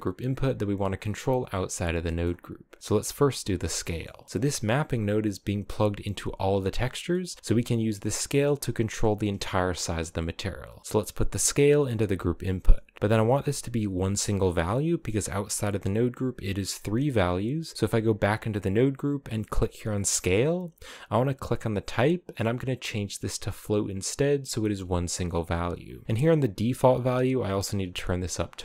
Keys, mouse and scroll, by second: 1.7-3.4 middle drag, 3.4 scroll up 1, 3.6-3.9 middle drag, 3.9-4.3 scroll down 1, 4.3 click, 4.5-5.4 scroll down 1, 5.4-6.3 scroll down 7, 6.3-6.8 scroll up 1, 6.8 middle click, 6.9-8.0 scroll up 1, 8.0-10.3 middle drag, 10.3 click, 11.6-13.5 drag, 14.1 Tab, 14.5-16.5 scroll up 3, 16.5 click, 17.7 Tab, 19.2 click, 21.0-24.0 drag, 26.3-27.7 drag, 28.2 click.